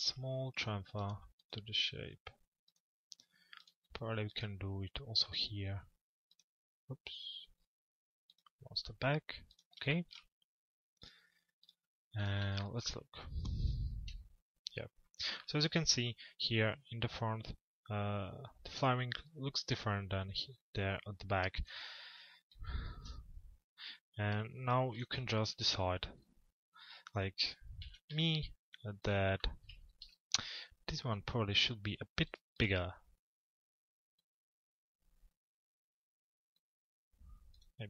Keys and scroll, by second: 13.6 F4, 27.5 f, 29.4 z, 30.0 F4.